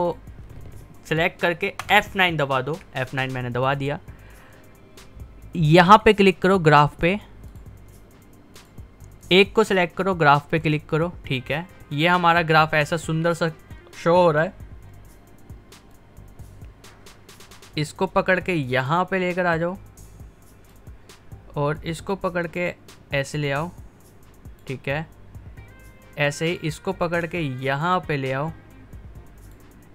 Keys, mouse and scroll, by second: 1.8 F9, 6.0 click, 15.9-29.9 drag, 26.0 typing.